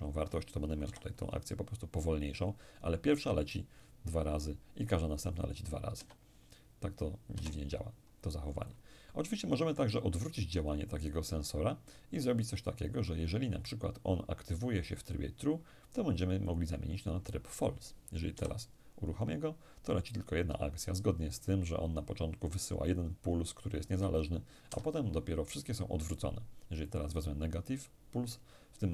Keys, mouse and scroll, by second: 0.5 p, 5.6 Escape, 7.0 Escape, 8.3 click, 11.9 click, 16.1 click, 18.0 p, 24.3 Escape, 25.8 click.